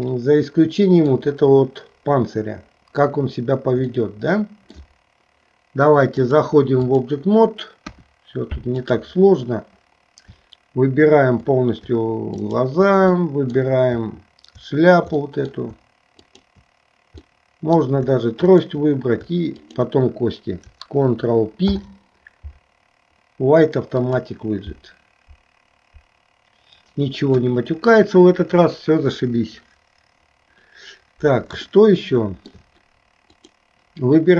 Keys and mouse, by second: 4.0 middle click, 6.2 click, 7.9 KP_1, 12.4 shift+click, 13.4 middle click, 15.3 middle click, 16.4 shift+click, 17.5 middle click, 18.6 shift+click, 19.6 shift+click, 21.7 ctrl+p, 27.4 KP_1, 31.8 shift+middle click.